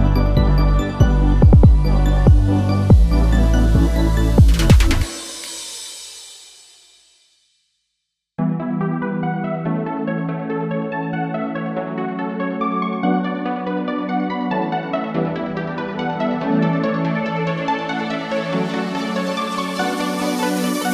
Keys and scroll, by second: 8.0-9.0 typing, 9.5 shift+Return, 10.3 Return.